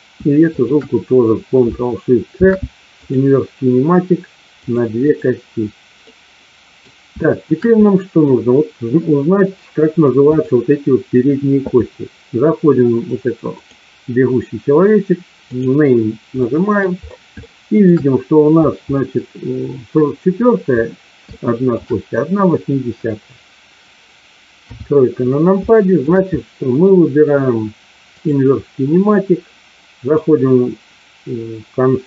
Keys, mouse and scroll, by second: 2.3 ctrl+shift+c, 4.9 click, 6.0 middle click, 7.2 shift+middle click, 7.8 middle click, 10.3 click, 13.4 click, 15.4 click, 16.4 middle click, 17.4 shift+middle click, 21.3 shift+middle click, 24.5 KP_3, 25.7 shift+middle click, 26.4 middle click.